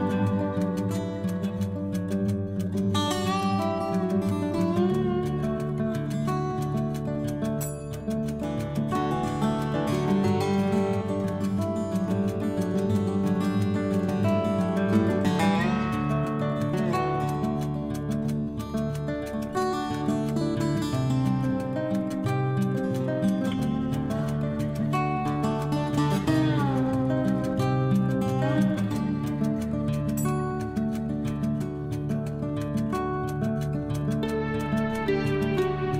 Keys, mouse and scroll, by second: 2.1-2.9 scroll up 3, 3.5-4.4 scroll up 1, 4.5-5.1 scroll down 4, 5.1-5.5 scroll up 1, 10.3 click, 15.9 click, 18.3 click, 20.7 click, 21.4 scroll down 1, 21.9-22.4 scroll down 1, 22.4 click, 28.0 click, 34.3 click.